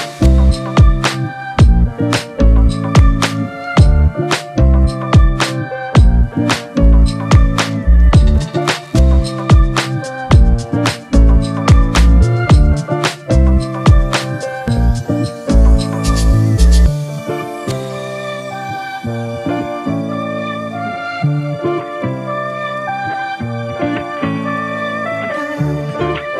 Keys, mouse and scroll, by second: 2.1 Return, 6.4-10.2 scroll down 1, 25.8-26.3 scroll up 1.